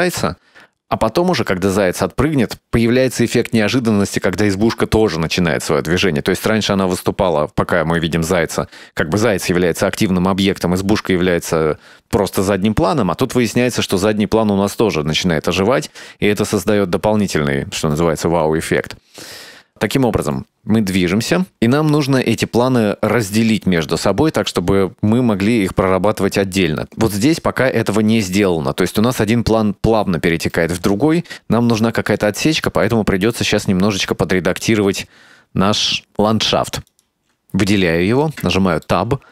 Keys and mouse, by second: 8.1-27.0 drag, 32.0-32.5 shift+middle drag, 33.7-34.4 middle drag, 37.0 right click, 38.5 Tab, 38.9-39.3 middle drag.